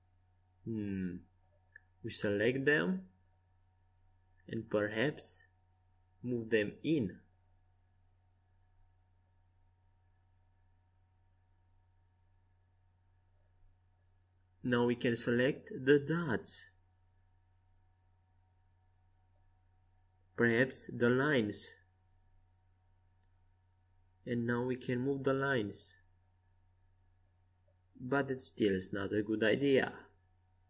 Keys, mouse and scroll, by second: 0.4 c, 6.2 g, 10.7 Escape, 12.0 a, 14.2-18.5 drag, 15.4-17.4 right drag, 17.5 ctrl+z, 18.2 right click, 19.0-20.7 drag, 20.9-22.8 drag, 22.2 middle click, 22.2 right click, 22.8-24.3 middle drag, 24.3-25.4 right drag, 24.8 click, 25.4-26.7 middle drag, 28.0 ctrl+z, 29.4 click.